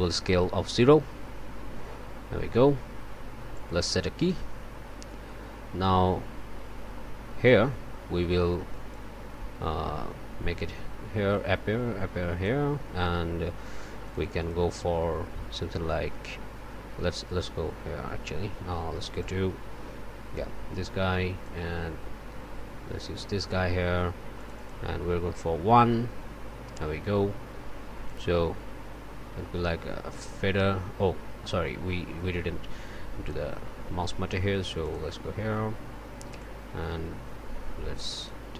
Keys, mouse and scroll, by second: 0.5 0, 1.1 Return, 3.5 click, 4.2 click, 5.8-7.7 drag, 8.9-12.7 drag, 14.0 click, 19.2-20.3 scroll down 1, 20.3 click, 21.4-23.4 drag, 24.3 click, 25.0 1, 26.3 F2, 31.0-34.3 drag, 34.8 click, 36.4-38.5 drag.